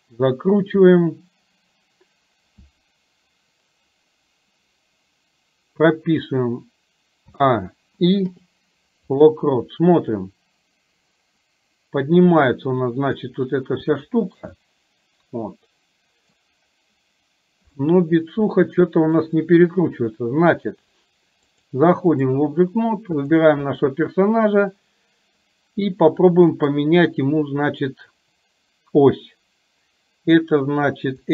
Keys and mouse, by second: 7.3 a, 8.3 i, 10.3-13.3 drag, 14.0-14.4 shift+middle drag, 14.7-16.4 middle drag, 17.8-19.3 middle drag, 21.5 click, 23.3 click, 26.8-31.3 right drag.